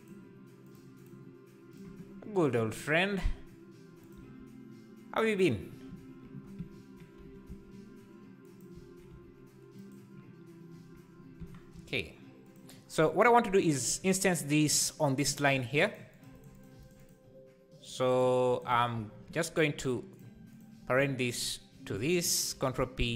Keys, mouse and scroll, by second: 1.7-3.2 right drag, 3.2 g, 4.1 s, 7.2 g, 9.1 Tab, 11.7 g, 15.5 Tab, 16.2-19.0 right drag, 19.0 Tab, 20.2 click, 21.4 shift+click.